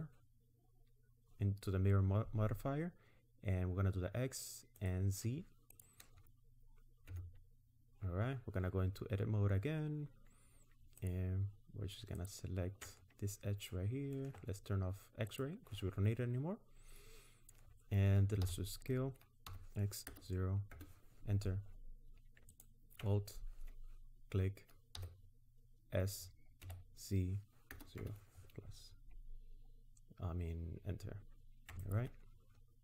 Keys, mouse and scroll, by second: 4.8 click, 5.7 click, 7.1 Tab, 9.0-10.4 scroll up 2, 11.0 alt+click, 12.2 alt+click, 15.3 click, 18.4 s, 22.5 alt+click, 25.0 s, 31.8 alt+click.